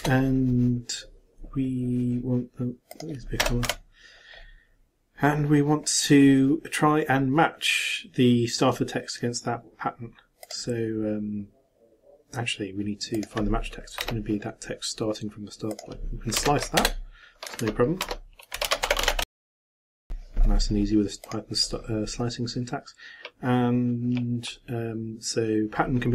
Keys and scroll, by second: 19.3 shift+t, 19.4 shift+space, 20.0 shift+BackSpace, 20.1 shift+].